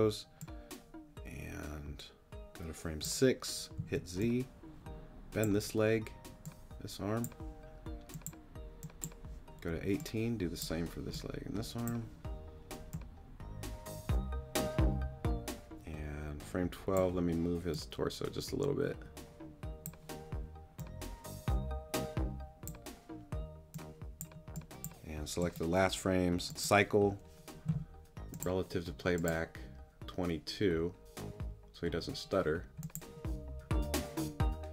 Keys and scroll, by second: 3.8 z.